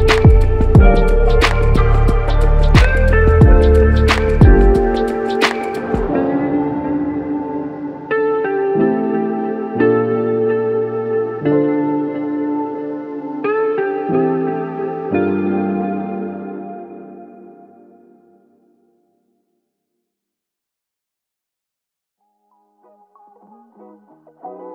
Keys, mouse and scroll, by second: 0.5 ctrl+click, 2.1 ctrl+click, 8.6 ctrl+z.